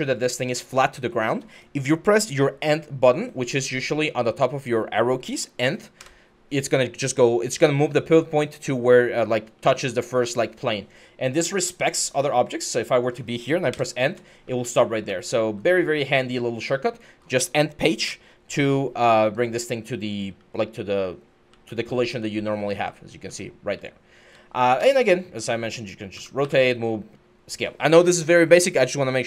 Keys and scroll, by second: 5.8 End, 9.3-10.0 typing, 13.5 End, 14.2-15.2 typing, 17.8 End, 18.9-24.6 typing, 25.9-26.7 typing.